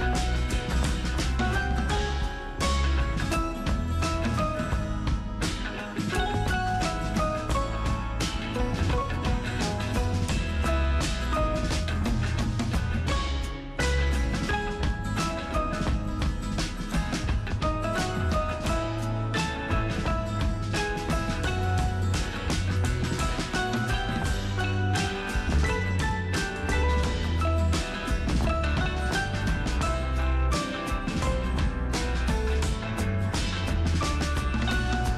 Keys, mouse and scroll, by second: 0.7-9.4 super+drag, 12.7 super+click, 18.6 ctrl+super+t, 21.9 super+Right, 22.1 super+Return, 30.8 ctrl+super+Num_Lock, 31.1 ctrl+super+t, 33.3 ctrl+alt+shift+super+t.